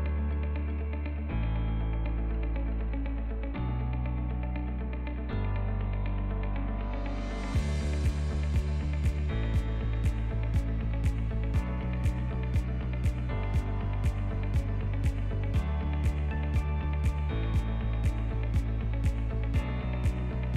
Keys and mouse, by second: 1.1 e, 6.7 click, 7.9 ctrl+r, 12.2 Tab, 12.7 click, 12.9 middle click, 13.1-14.0 right drag, 14.4 ctrl+click, 14.7 click, 14.9-15.8 middle drag, 15.9 Tab, 16.3 shift+middle click, 16.6 ctrl+middle click, 17.9 e.